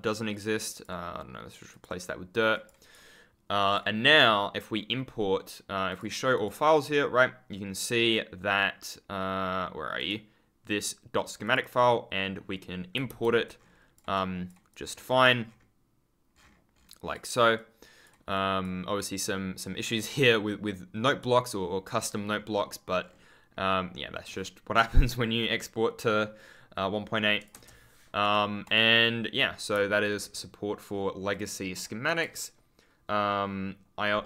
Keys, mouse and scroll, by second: 0.6 click, 1.6 click, 2.5 click, 13.0 ctrl+v, 13.4 ctrl+click, 13.5-14.1 ctrl+scroll up 1, 14.1 ctrl+click, 14.7-15.6 ctrl+scroll up 1, 16.2-17.2 ctrl+scroll down 1, 19.1-19.7 scroll up 1, 19.7-20.4 scroll down 1, 21.1 ctrl+click, 22.0 scroll up 1, 22.9-23.2 scroll down 1, 27.4 BackSpace, 28.1 right click, 28.5 click, 29.9 ctrl+click, 30.1-31.4 scroll up 1.